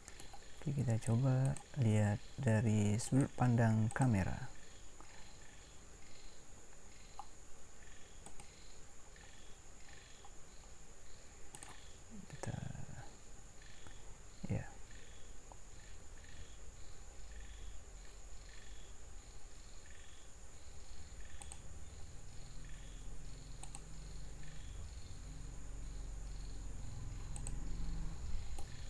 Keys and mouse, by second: 28.6-28.8 middle drag.